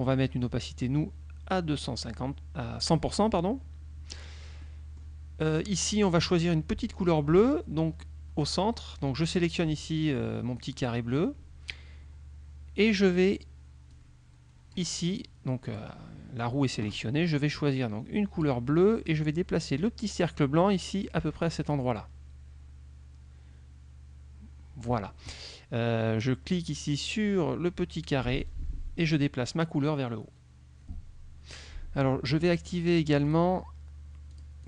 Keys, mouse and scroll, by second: 0.5-3.1 drag, 4.7 click, 6.1 click, 9.3 click, 14.0-15.0 drag, 15.8 click, 17.8 click, 20.4-25.1 drag, 28.6-31.9 drag, 33.4 click, 34.4 click.